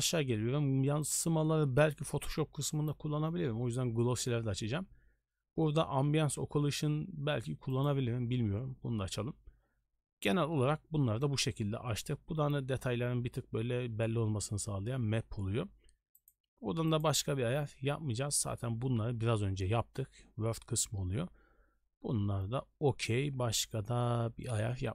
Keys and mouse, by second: 1.0 click, 1.8 click, 7.7 click, 17.0 click.